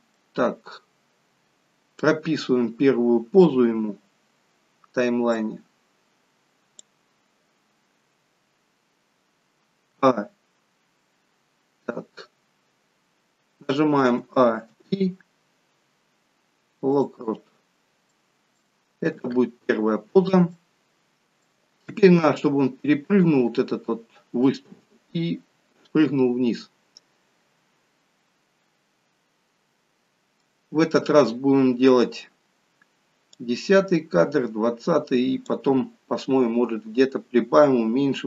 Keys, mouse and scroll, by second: 0.2 middle click, 5.7 click, 9.9 a, 14.2 a, 18.1 middle click, 19.7 KP_3, 20.6 shift+middle click, 28.6-29.5 scroll up 1, 30.6 middle click, 30.6-31.9 scroll up 7, 33.4 click.